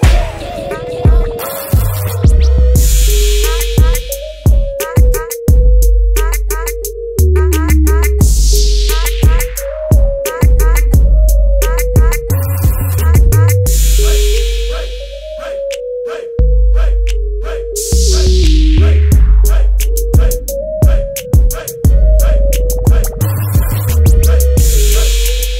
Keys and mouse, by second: 2.6-3.7 drag, 4.4 click, 5.4 middle click, 6.4 click, 7.0-22.9 middle drag, 22.9-25.3 drag.